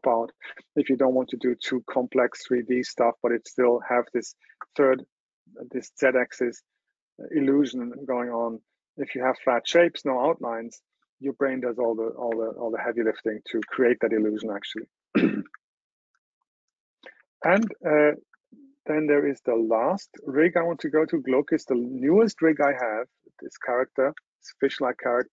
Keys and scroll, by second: 15.3 super+w, 17.5 super+h.